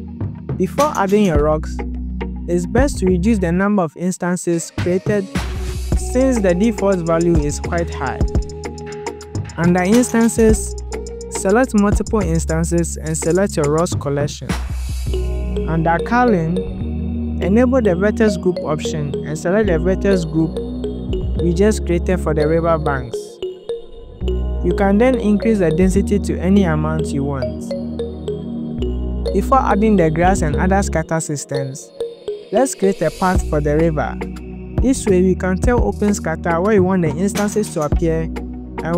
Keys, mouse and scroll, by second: 3.9 click, 7.1-11.3 drag, 11.6 click, 11.8 click, 12.7 click, 14.4 click, 14.6 click, 15.1 click, 15.9 click, 18.2 shift+click, 19.3-20.4 scroll down 2, 20.4-21.5 drag, 21.8-23.6 drag, 23.7-24.4 scroll down 2, 24.6 click, 24.7-25.4 scroll down 2, 25.4 click, 25.9-27.5 scroll up 7, 27.5 click, 27.5 scroll up 1, 27.9 shift+click, 28.3 click, 32.9 click.